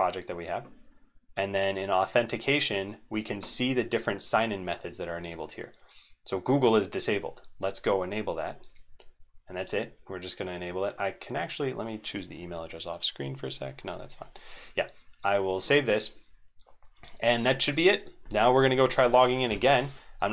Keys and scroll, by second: 13.8 super+Right, 14.0 super+Right, 14.0 c, 14.2 super+Up, 14.4 super+Up.